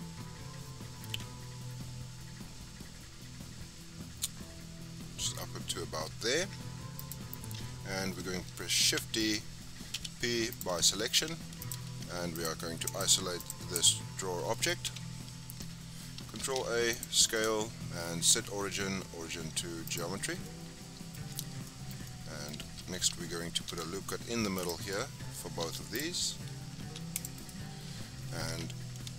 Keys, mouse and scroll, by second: 8.8 shift+d, 9.9 p, 11.1 Tab, 11.6 click, 12.3 click, 12.8 click, 13.3 click, 13.7 click, 14.8 KP_Divide, 16.3 ctrl+a, 17.3-20.3 right drag, 20.3 scroll down 1, 20.4-21.1 middle drag, 21.1-21.6 scroll up 4, 21.6-22.6 shift+middle drag, 22.6 Tab, 23.6 ctrl+r, 25.6 ctrl+r, 26.7 ctrl+r.